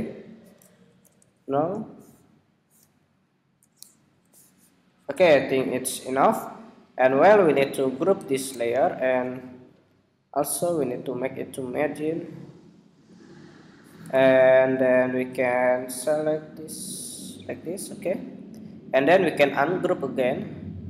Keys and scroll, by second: 0.7 super+=, 2.6 alt+Up, 5.2 super+=, 5.6 super+-, 7.8 super+g.